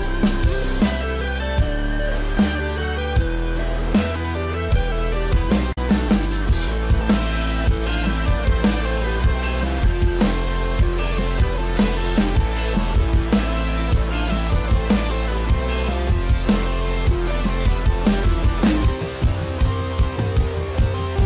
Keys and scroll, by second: 0.0 ctrl+=, 0.0 ctrl+=, 3.5 space, 5.1 space, 9.8 ctrl+=, 10.0 ctrl+-, 10.9 ctrl+=.